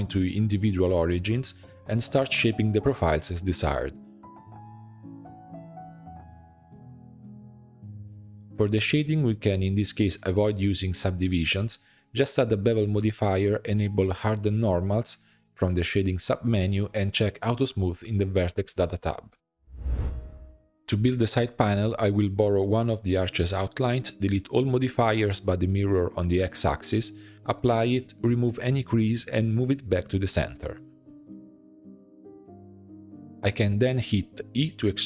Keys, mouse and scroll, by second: 0.7 shift+middle click, 1.3 click, 2.0 shift+middle click, 2.3 scroll up 2, 2.4 s, 3.9 s, 5.3 middle click, 5.4-8.2 typing, 5.9 middle click, 7.3 middle click, 10.1 e, 10.7 scroll down 4, 11.0 middle click, 11.6 g, 12.3 e, 13.4-16.0 shift+drag, 16.7-17.8 drag, 18.4-19.4 shift+middle drag, 19.4 click, 20.3 alt+click, 20.3 shift+d, 21.1 p, 21.6 Tab, 21.8-22.3 drag, 22.7 h, 23.2 click, 23.9-25.7 drag, 26.3-26.9 drag, 26.9 middle click, 27.2 Tab, 27.4 a, 28.1 click, 28.5 1, 29.5-30.6 drag, 30.9 shift+middle click, 31.2-31.8 scroll up 4, 31.8 g, 33.2 e, 33.6 alt+s.